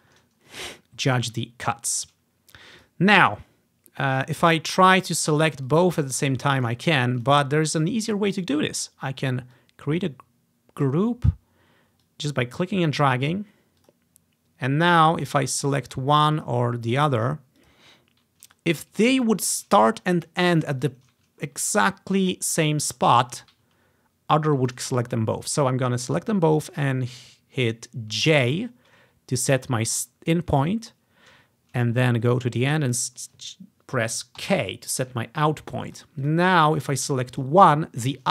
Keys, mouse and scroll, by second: 0.5-1.0 ctrl+scroll up 1, 1.0 ctrl+scroll down 1, 2.8-4.2 drag, 4.5-4.9 ctrl+scroll down 1, 5.8-6.8 ctrl+drag, 7.3 click, 9.6-11.0 drag, 12.1 click, 13.9 click, 15.0 click, 15.7 click, 16.0 click, 16.4 click, 17.3 click, 17.7 click, 18.6 click, 19.4 click, 20.9 ctrl+click, 21.5-22.3 ctrl+scroll up 1, 22.3-22.9 ctrl+scroll down 1, 22.9 ctrl+scroll up 1, 22.9 ctrl+scroll down 1, 23.0 scroll up 1, 23.8 scroll up 2, 24.6-25.1 scroll up 1, 24.6 typing, 28.3 j, 30.3-31.8 scroll down 1, 31.8 ctrl+scroll up 1, 32.4-34.5 ctrl+scroll up 3, 32.6 typing, 34.5 typing, 35.3-36.1 ctrl+scroll down 1, 36.0 click, 36.3 ctrl+click, 37.1 click, 37.4 click, 38.1 click.